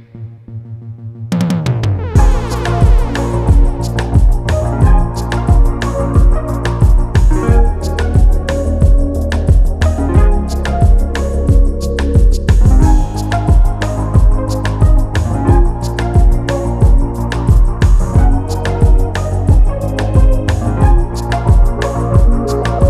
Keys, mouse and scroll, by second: 0.3 click, 1.3-2.1 scroll down 6, 2.9 shift+d, 4.4-5.8 scroll up 2, 5.8 click, 6.3 scroll down 1, 6.6 middle click, 6.8-7.2 scroll up 2, 7.2 click, 7.8 shift+d, 8.5-8.9 scroll up 2, 8.9-10.4 drag, 10.4-11.4 scroll up 2, 10.7 middle click, 11.4 click, 11.9 shift+d, 12.9 middle click, 13.2-13.5 scroll up 2, 13.5-15.6 drag, 16.4-18.4 middle drag, 18.9 middle click, 19.7-20.8 scroll down 2, 20.8 shift+d, 21.9-22.6 scroll up 2.